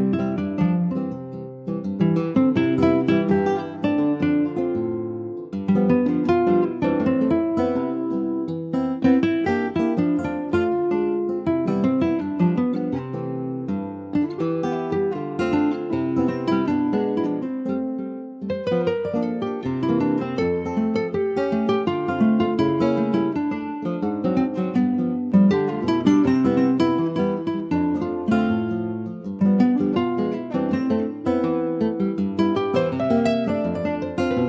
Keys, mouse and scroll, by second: 3.8 scroll down 2, 4.1 middle click, 4.5 Tab, 4.6 click, 4.9-5.2 scroll down 3, 5.5 middle click, 6.0-6.3 scroll up 2, 6.5 ctrl+s, 6.6 middle click, 6.8 scroll up 2, 7.0 Tab, 7.2 click, 7.5-7.8 scroll up 2, 7.8 shift+middle click, 8.2 3, 8.5 click, 8.7 scroll up 2, 9.5 alt+shift+click, 11.0 s, 12.1 ctrl+s, 12.9 alt+middle click, 13.3-14.3 scroll up 2, 14.3-15.0 scroll down 1, 15.0 click, 17.5-19.6 middle drag, 19.6 ctrl+r, 20.8 s, 22.0 ctrl+b, 24.3-24.6 scroll down 2, 24.6 Tab, 24.9 click, 25.1-25.4 scroll down 5, 25.4 shift+middle click, 26.4 scroll down 2, 26.5-27.6 shift+middle drag, 27.6 ctrl+z, 27.9 scroll up 1, 28.3 ctrl+z, 28.6 middle click, 29.6 ctrl+z, 29.8-30.3 scroll up 2, 30.3 middle click, 30.7 scroll down 1, 30.9 shift+middle click, 31.7 ctrl+s, 32.1 click, 34.0 3, 34.2 click.